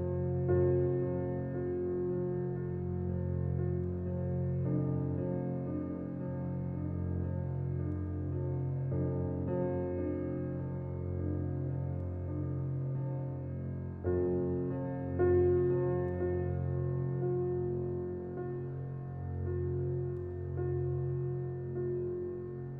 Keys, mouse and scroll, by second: 3.3-14.7 drag, 20.2-22.7 alt+drag.